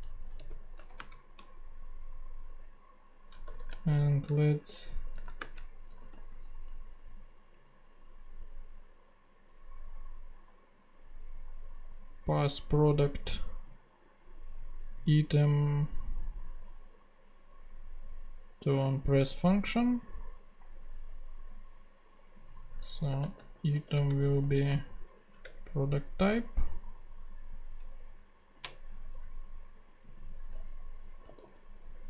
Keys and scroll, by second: 0.3 super+Return, 0.5 super+v, 0.9 shift+super+;, 1.0 shift+space, 3.5-7.0 typing, 22.9-24.8 typing, 25.4 shift+Return, 31.0-32.0 typing.